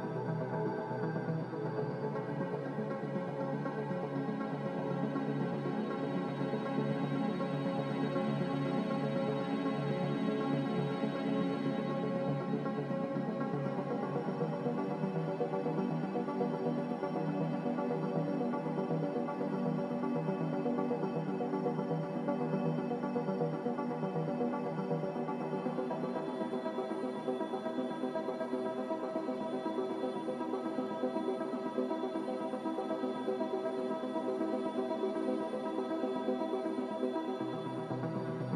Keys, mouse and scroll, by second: 6.7 z, 10.2 Delete, 33.8 Delete.